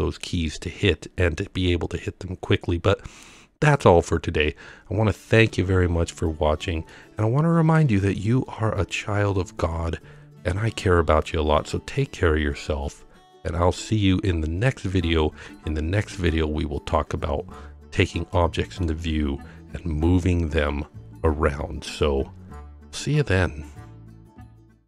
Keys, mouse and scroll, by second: 0.2-1.4 middle drag, 6.3 scroll down 1, 6.9-8.2 middle drag, 18.4-18.9 middle drag, 18.4-18.9 scroll down 1, 22.4 scroll up 2, 22.8-23.4 middle drag.